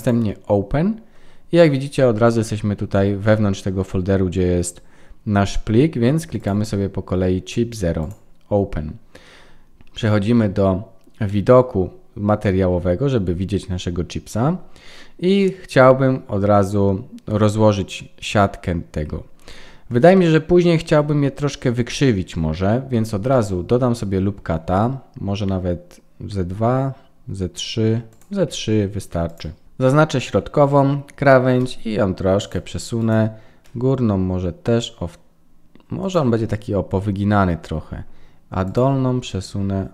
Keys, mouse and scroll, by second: 20.1 middle click, 22.9 Tab, 23.3 middle click, 24.6 ctrl+r, 29.2 click, 29.6 middle click, 33.0 click, 33.6 g, 36.3 middle click, 38.6 click, 39.4 g.